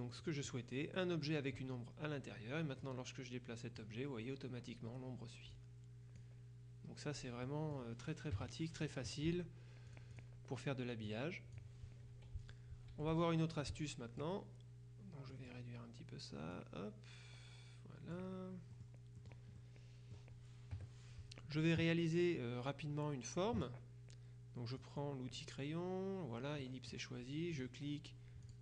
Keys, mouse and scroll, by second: 0.3 click, 2.9-4.4 drag, 5.6 click, 7.5 middle click, 8.4 KP_Subtract, 9.9-10.7 drag, 11.1 click, 12.5 click, 13.0 F2, 13.2 click, 15.4 click, 16.6-18.7 drag, 18.8-19.9 middle drag, 20.8 KP_Subtract, 24.9 click, 26.7 middle click, 27.7 click, 28.5 click.